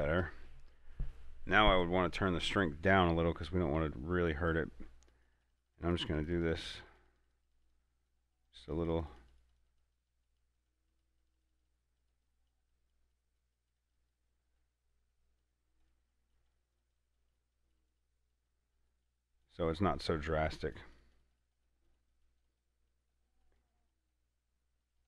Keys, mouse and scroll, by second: 0.0-2.8 shift+middle drag, 2.8-5.4 drag, 14.8 middle click, 15.7-19.8 drag, 20.1 middle click, 20.9 click.